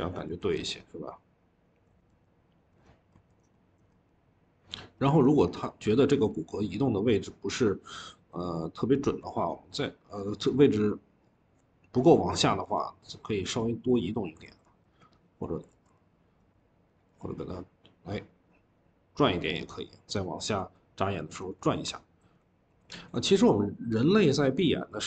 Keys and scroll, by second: 14.3 ctrl+z, 15.6 ctrl+z.